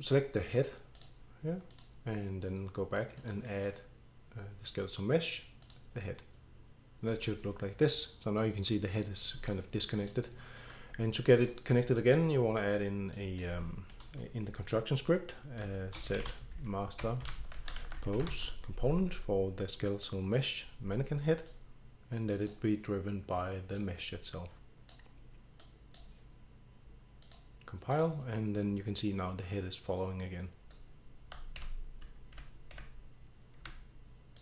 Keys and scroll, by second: 15.6-18.8 typing, 20.2-20.9 typing, 23.1-23.9 typing, 31.6-33.9 typing.